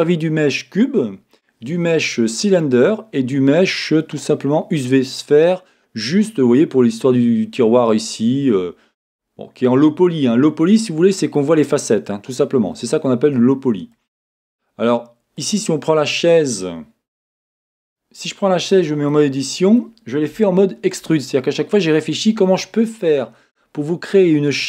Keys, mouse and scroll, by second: 7.7-9.7 middle drag, 7.7-9.7 scroll up 2, 9.7 scroll down 1, 10.7 middle click, 13.1-14.7 middle drag, 15.4-17.3 drag, 17.3 w, 17.5-18.7 drag, 18.7 Tab, 19.1-24.6 middle drag.